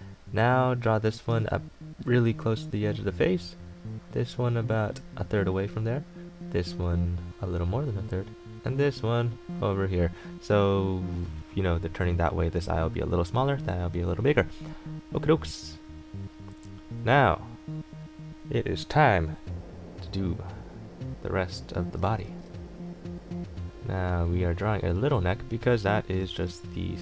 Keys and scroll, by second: 22.0 ctrl+z.